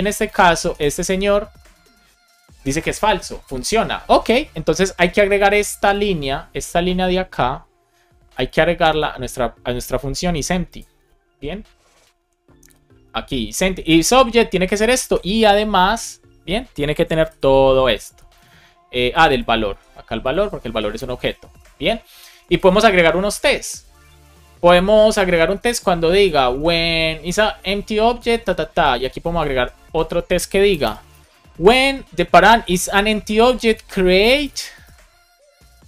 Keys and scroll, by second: 0.4 BackSpace, 8.3 super+c, 14.8 space, 15.2 super+v, 17.1 alt+shift+f, 17.6 super+s, 19.6 super+c, 20.6 super+v, 21.0 super+s, 29.4 super+c, 30.6 Return, 31.0 super+v, 34.0 space, 35.0 BackSpace.